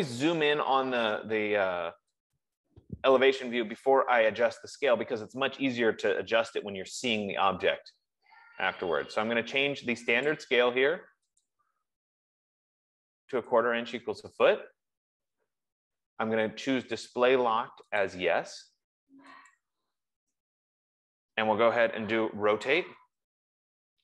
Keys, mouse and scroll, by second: 2.6 click, 10.7 click, 11.7 click, 13.8 click, 17.4 click, 18.5 click, 19.9 click, 22.4-24.0 typing.